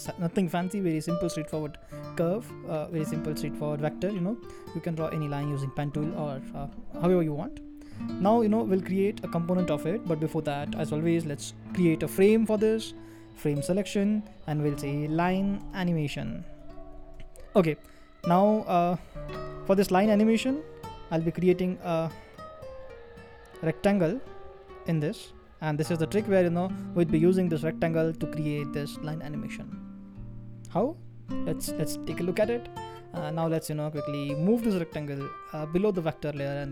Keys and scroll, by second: 16.2-17.4 typing, 27.1 typing.